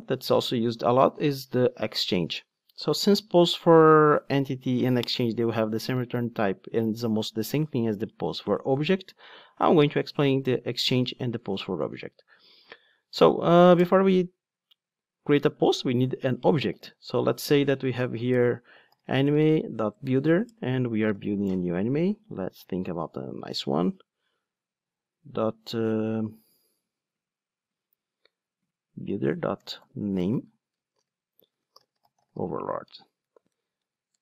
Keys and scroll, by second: 20.0 Return, 30.2 Return.